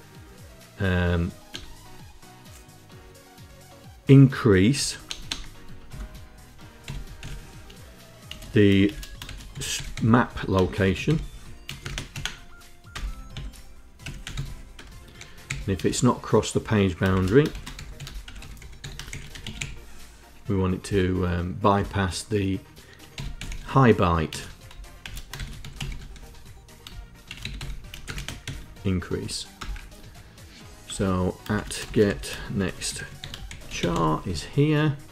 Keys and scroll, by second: 1.2 BackSpace, 4.5 BackSpace, 4.8 BackSpace, 5.0 BackSpace, 5.6 Tab, 6.3-11.8 typing, 12.6 Return, 13.0 Tab, 13.5-15.5 typing, 16.6-19.8 typing, 20.5 Return, 21.4 Tab, 22.6-28.1 typing, 29.3 Return, 30.6 Return, 31.0-34.1 typing.